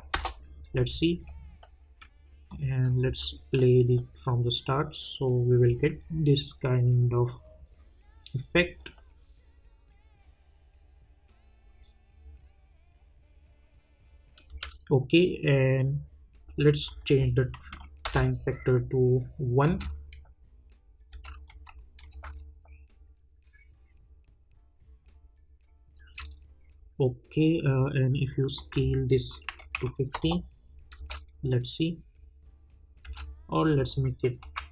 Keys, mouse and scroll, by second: 0.1 Return, 2.5 click, 3.0 space, 14.5 space, 16.8 click, 18.0 Return, 19.6 space, 21.4 click, 22.1 space, 25.9 space, 28.5 click, 30.1 Return, 31.0 space, 33.0 space, 33.7 click.